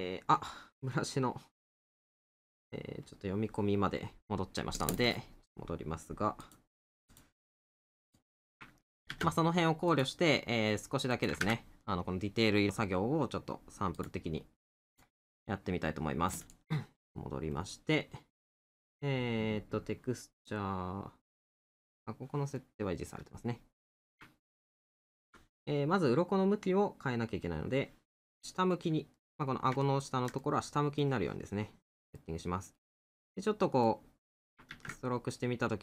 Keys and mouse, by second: 18.6 middle click, 22.6 middle click, 24.5 middle click, 28.1 middle click, 32.2 middle click.